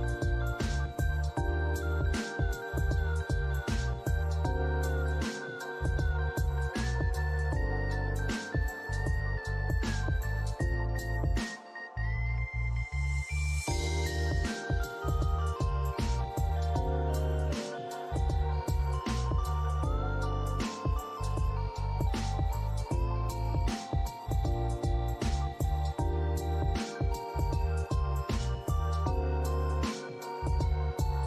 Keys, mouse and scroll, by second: 0.6 alt+middle click, 2.8 alt+click, 6.2 double click, 7.8 alt+middle click, 8.2 alt+click, 11.5 alt+middle click, 11.9 alt+click, 13.7 double click, 20.5 scroll down 1, 20.8 alt+middle click, 21.1 alt+click, 21.7 alt+middle click, 22.4 scroll down 1, 22.6 middle click, 25.4 scroll up 1, 25.8 middle click, 28.0 double click.